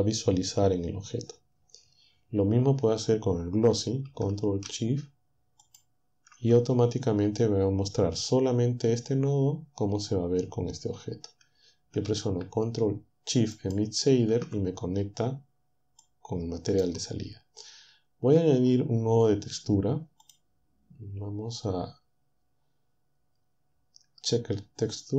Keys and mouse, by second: 5.6 ctrl+shift+click, 13.6 ctrl+shift+click, 16.0-17.0 drag, 20.3 click.